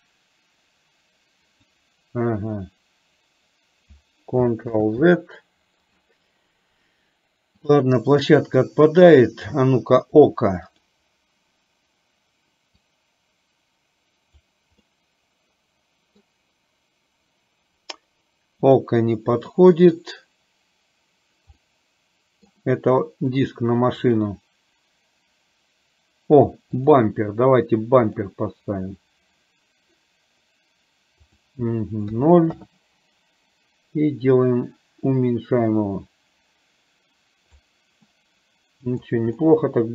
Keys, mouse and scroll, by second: 0.1-1.9 drag, 4.9 ctrl+z, 7.7-9.6 drag, 12.7-14.6 drag, 14.9-16.2 middle drag, 18.7-21.5 drag, 21.7 middle click, 24.1-27.0 drag, 28.1 click, 31.2-32.7 drag, 34.2-37.7 drag, 38.1-39.1 middle drag, 39.5-39.9 middle drag.